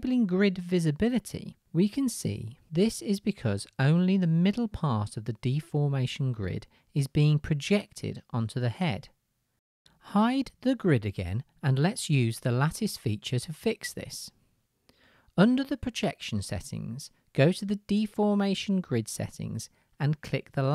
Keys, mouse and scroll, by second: 1.9-6.6 right drag, 6.6 click, 6.7 right click, 6.9 click, 7.0-20.7 right drag, 13.2-15.2 drag, 13.2-15.2 middle drag.